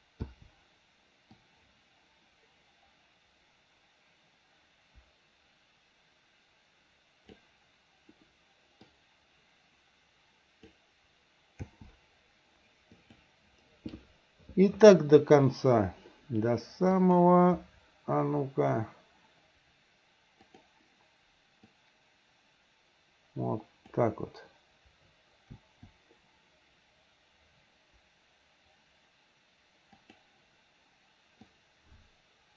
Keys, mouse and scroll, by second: 0.3 i, 1.5-7.5 drag, 8.9 click, 9.3-10.8 drag, 11.7 i, 13.0 click, 17.0 click, 20.6 click, 21.7-24.0 drag, 25.6 i, 30.1 click, 31.6-32.5 drag.